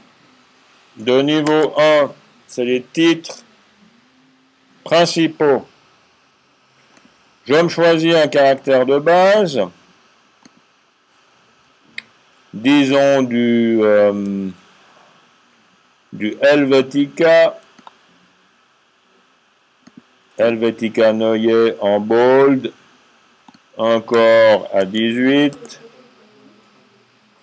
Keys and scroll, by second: 0.9-1.3 typing, 24.6 typing.